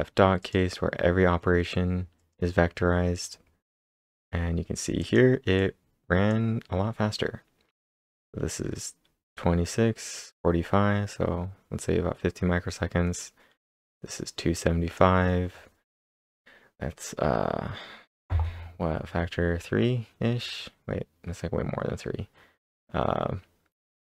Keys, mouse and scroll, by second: 0.4 click, 2.2 click, 4.3-5.5 typing, 5.0 click, 5.9 click, 6.9-8.4 scroll up 2, 8.5 scroll down 3, 10.2-11.6 typing, 11.1 scroll down 1, 12.2 scroll down 2, 12.7-13.7 scroll up 1, 14.1-17.2 drag.